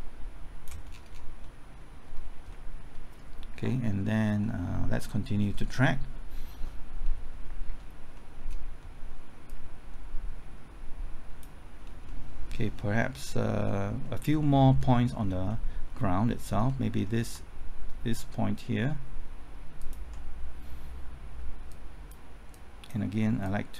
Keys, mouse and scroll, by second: 0.9 scroll down 1, 1.4 middle click, 2.1-2.5 scroll up 1, 2.5 middle click, 4.2 scroll up 1, 4.4 middle click, 5.0-6.2 scroll up 1, 7.0 scroll down 1, 8.1 middle click, 9.4-11.5 drag, 11.8 scroll down 1, 12.0 middle click, 12.6 scroll up 1, 12.9 middle click, 14.2 scroll down 1, 14.4 middle click, 14.9-15.4 scroll up 1, 15.4 middle click, 15.8-16.3 scroll up 1, 16.3 middle click, 16.8-17.3 scroll up 1, 17.3 typing, 19.7 ctrl+click, 21.7-23.7 drag.